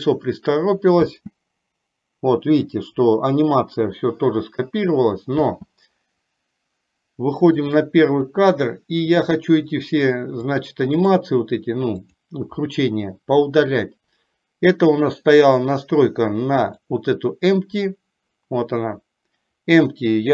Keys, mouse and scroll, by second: 0.0 middle click, 1.4 space, 5.5 space, 7.8 click, 8.5-9.5 drag, 10.5 click, 12.3 click, 16.7 click.